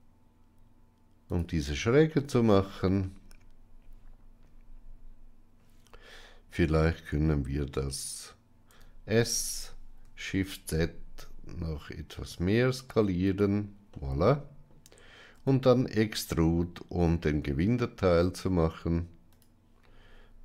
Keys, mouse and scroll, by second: 2.0 shift+middle click, 8.8 s, 13.8 middle click, 15.3 e.